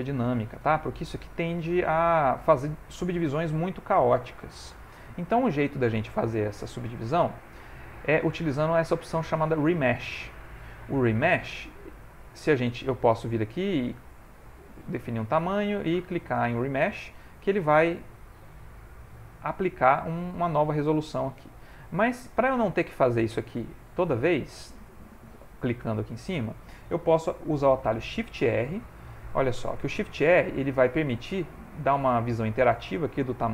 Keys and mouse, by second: 5.6 middle click, 6.3 ctrl+middle click, 9.6 click, 19.0 middle click, 20.1 middle click, 24.4 click, 27.2 middle click, 28.4 shift+r.